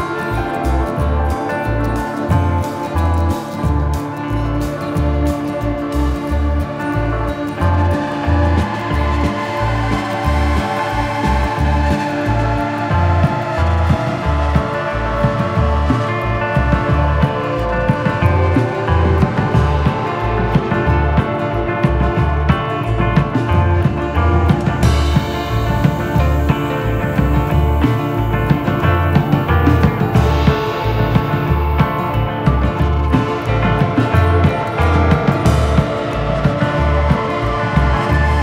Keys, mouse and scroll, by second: 1.8 click, 8.8 click, 13.0 click, 13.5 middle click, 15.9 click, 20.0 s, 22.1 click, 24.6 click, 24.6 middle click, 25.9 s, 30.0 middle click, 31.0 click, 32.0-32.4 scroll up 2, 32.4 middle click, 33.2 shift+middle click, 33.8 middle click, 35.2 click.